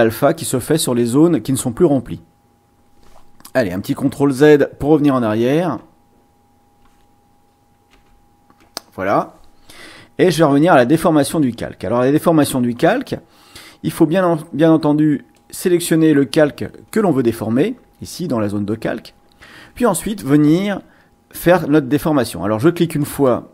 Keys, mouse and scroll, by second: 5.1 ctrl+z, 7.9 ctrl+z, 11.3 click, 15.3 click, 23.0 click.